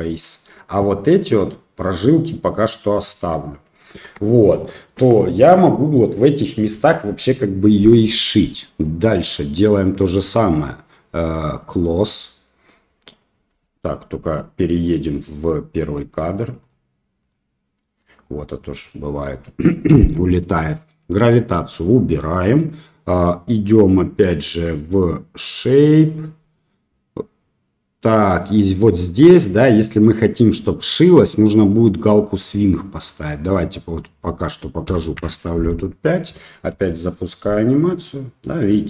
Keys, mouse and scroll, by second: 0.9 middle click, 2.9 middle click, 4.1 Tab, 4.4 middle click, 5.4-6.0 middle drag, 11.6 click, 15.8 click, 16.6 click, 17.2 click, 17.8 middle click, 18.9 middle click, 20.8 click, 21.8 middle click, 24.9 click, 29.6 middle click, 33.5-33.9 drag, 34.1-35.7 drag, 36.3 middle click, 36.7 space.